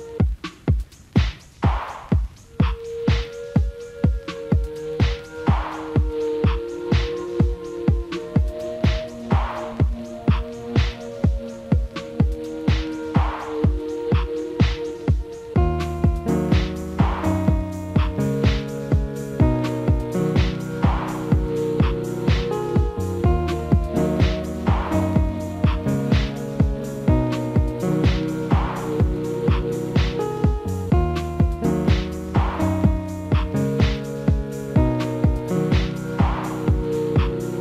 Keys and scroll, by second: 10.1 ctrl+z, 15.8 ctrl+a, 25.3 ctrl+s.